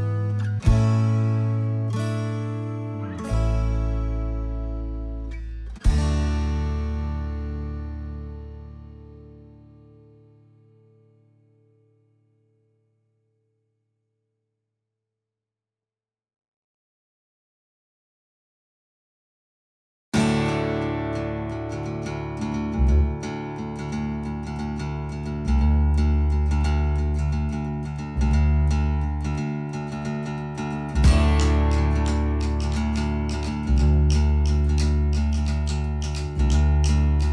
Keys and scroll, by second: 25.6 h.